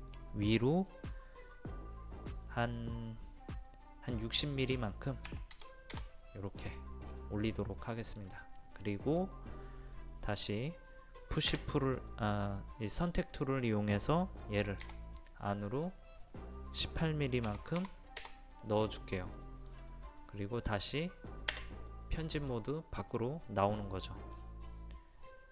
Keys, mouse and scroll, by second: 5.3 KP_6, 5.5 KP_0, 7.0-7.5 scroll down 1, 7.5-11.6 middle drag, 11.6 space, 12.9 click, 14.8 p, 15.7 click, 17.4 KP_1, 17.8 KP_8, 19.4 middle click, 21.6 space, 22.3 click, 23.0-24.6 middle drag, 25.3-25.5 scroll up 1.